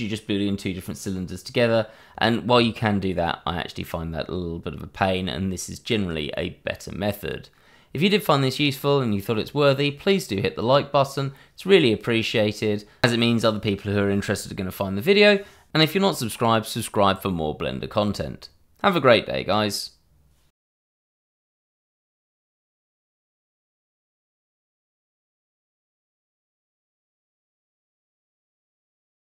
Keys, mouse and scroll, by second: 0.2 alt+click, 0.3 click, 1.9 click, 2.1 shift+z, 2.5 alt+click, 3.2 shift+click, 3.7 ctrl+z, 4.0 click, 4.3 middle click, 5.2 middle click, 6.0 alt+shift+click, 6.5 middle click, 7.4 click, 8.1 click, 8.3 middle click, 9.1 click, 9.5 click, 10.3 alt+shift+click, 10.9 click, 11.6 click, 12.1 click, 12.3 middle click, 12.9 alt+shift+click, 13.1 click, 13.9 shift+e, 14.1 click, 14.2 Tab, 14.8 scroll down 1, 14.9 click, 15.0 middle click.